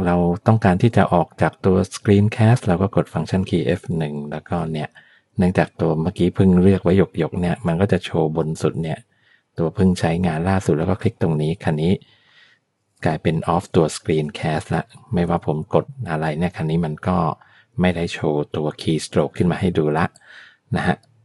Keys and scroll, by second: 3.7 F1.